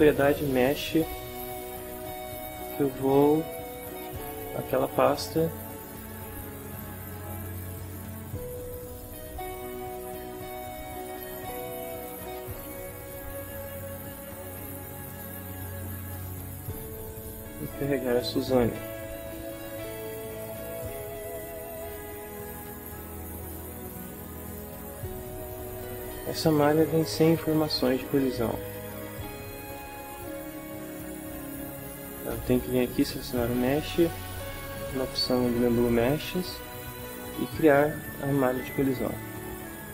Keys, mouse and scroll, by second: 1.9 click, 2.6 click, 5.8 click, 7.6 click, 8.8 click, 10.6 click, 12.6 f, 14.4-16.4 drag, 17.0-18.0 drag, 18.7-20.6 drag, 21.2-22.4 shift+middle drag, 23.0-24.1 drag, 24.7-26.7 drag, 28.6-29.9 middle drag, 30.0 ctrl+middle click, 30.8 ctrl+shift+middle click, 33.0 click, 36.1 click, 38.9 click.